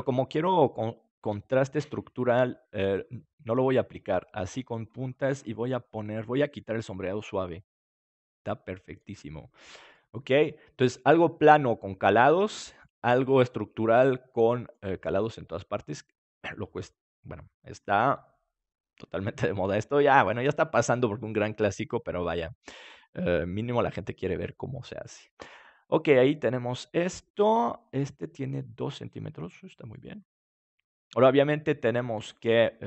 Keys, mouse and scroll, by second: 3.2-6.9 drag, 5.7-8.8 middle drag, 7.0-8.8 drag, 8.4 right click, 13.1-17.6 middle drag, 22.2-23.9 middle drag, 32.1 ctrl+s.